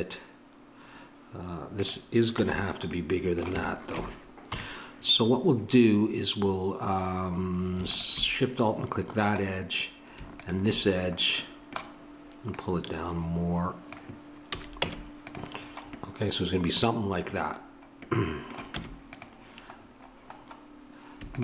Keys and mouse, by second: 2.3 a, 4.4 KP_3, 7.8-9.5 drag, 9.5-13.8 middle drag, 13.8 click, 14.5 a, 14.8 Tab, 18.7 Tab, 19.1-20.7 drag.